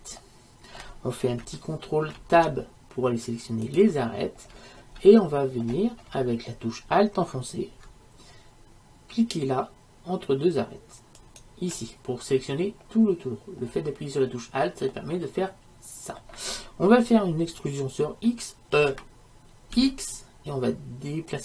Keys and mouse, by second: 0.3-2.2 middle drag, 2.2 ctrl+Tab, 6.2-11.3 middle drag, 11.3-13.1 right drag, 13.7-16.3 middle drag, 18.8 e.